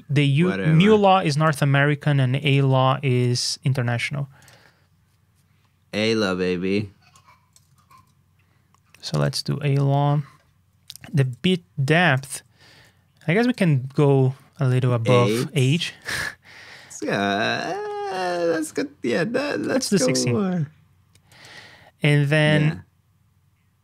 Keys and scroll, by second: 7.7 super+c, 7.9 super+Tab, 9.6 super+v, 10.9 ctrl+a, 12.1 ctrl+j.